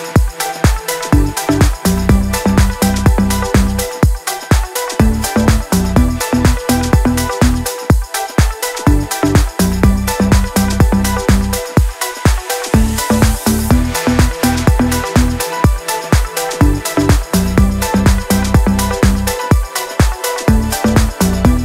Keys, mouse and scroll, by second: 3.1 scroll down 1, 3.3-3.7 scroll up 1, 3.7 scroll down 1, 3.8-4.2 scroll up 1, 4.2 click, 4.5-4.8 scroll down 1, 4.8-5.6 scroll up 1, 5.6-6.0 drag, 7.2-7.6 shift+click, 8.8-9.6 scroll down 1, 9.6 click, 9.9 shift+click, 11.0 ctrl+z, 11.4 click, 12.3 Up, 14.0 click, 15.2 click, 16.1 i, 16.8 click.